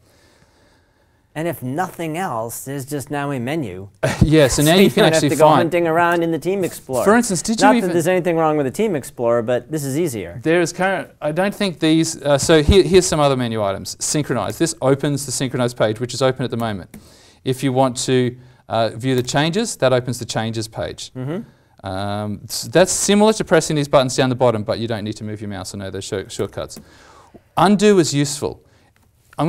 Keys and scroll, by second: 4.7 alt+m, 16.5 alt+m, 26.3 alt+m.